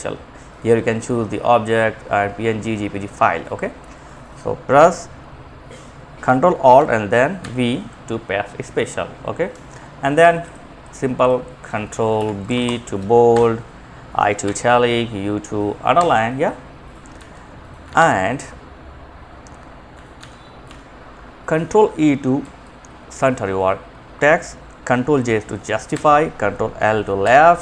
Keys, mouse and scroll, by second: 4.0 click, 6.7 ctrl+alt+v, 8.8 Escape, 9.7-11.5 drag, 11.7 Home, 11.9 End, 12.7 ctrl+b, 13.7 ctrl+i, 15.3 u, 16.5 z, 17.1 ctrl+z, 19.5 ctrl+z, 19.9 Left, 21.6 ctrl+e, 25.2 ctrl+j, 26.6 ctrl+l.